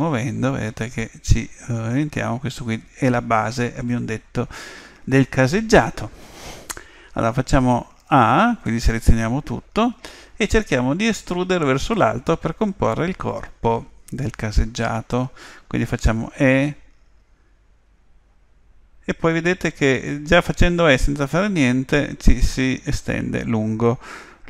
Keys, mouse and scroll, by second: 7.6 a, 8.0 a, 16.2 e.